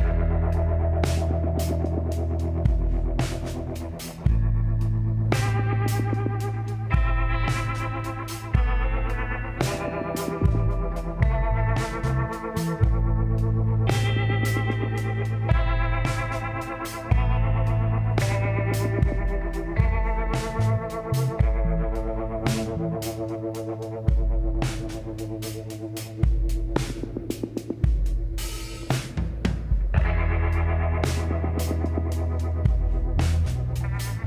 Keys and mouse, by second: 3.4 l, 5.3-7.0 drag, 10.1-12.0 drag, 13.0-21.6 middle drag, 22.9 click, 23.5 middle click, 23.8 click, 23.9-26.3 middle drag, 26.3 shift+s, 28.0 shift+a, 30.5 s.